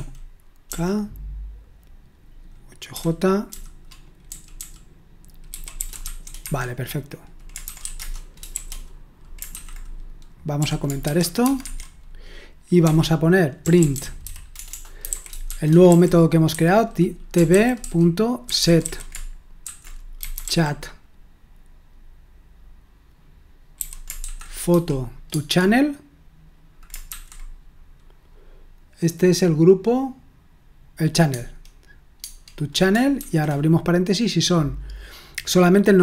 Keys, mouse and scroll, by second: 0.0-0.7 typing, 2.9-9.5 typing, 10.6-11.6 typing, 12.8-20.9 typing, 23.8-24.7 typing, 25.3 Tab, 27.0 typing, 31.3 Tab, 32.2-33.6 typing.